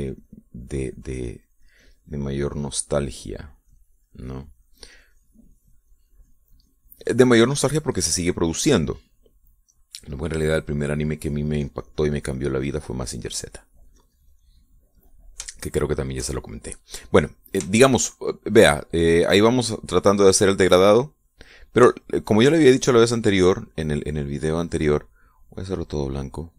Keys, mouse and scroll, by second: 3.6-7.4 drag, 10.3-11.3 middle drag, 11.7-13.9 drag, 14.4-15.7 drag, 16.7-17.9 shift+middle drag, 18.1-22.8 shift+middle drag, 22.8 shift+click, 24.4 click, 25.9 click.